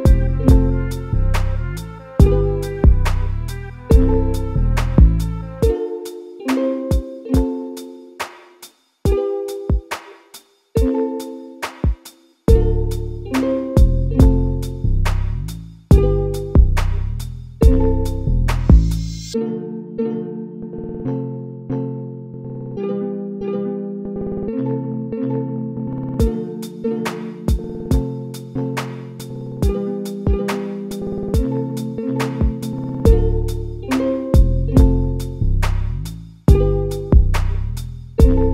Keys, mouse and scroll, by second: 0.2 shift+click, 0.9 ctrl+click, 1.6 shift+click, 2.6 ctrl+click, 3.3 ctrl+click, 4.0 ctrl+click, 4.3 ctrl+click, 4.7 ctrl+click, 5.0 ctrl+click, 5.5 ctrl+click, 5.8 ctrl+click, 6.3-9.2 middle drag, 9.2 p, 10.5 Tab, 11.1 click, 15.3 KP_Divide, 16.2 Tab, 17.0-18.0 scroll up 1, 18.0 click, 19.0 2, 19.1 click, 19.8 shift+click, 20.3-23.6 typing, 21.1 click, 24.1-25.5 middle drag, 25.5 f, 26.0-27.4 shift+middle drag, 27.4 click, 28.0 shift+click, 28.5 f, 28.7 a, 28.9 a, 29.2 click, 29.8-31.6 middle drag, 31.6-32.5 f, 32.6 f, 33.6 middle click, 34.2 ctrl+z, 36.1 click, 36.2 click, 37.3 f, 37.8 a, 38.0 a, 38.4 middle click.